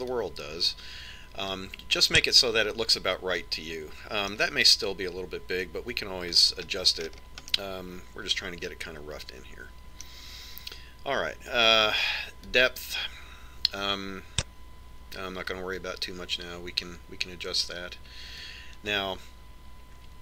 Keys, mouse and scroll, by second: 2.1 click, 4.1-5.9 middle drag, 8.3 scroll down 1, 8.5-11.3 middle drag, 14.3 click.